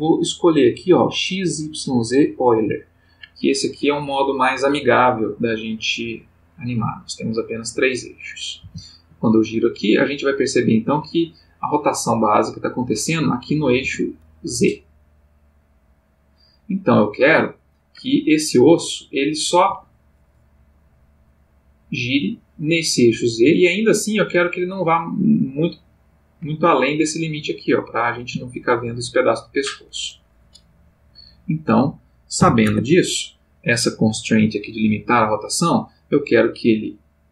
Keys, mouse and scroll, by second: 5.4 click, 8.6 r, 13.8 Escape, 14.8-20.1 drag, 19.7 Escape, 20.4-28.3 drag, 29.7 click, 31.4 click, 32.3 0, 32.6 Return, 35.2 click.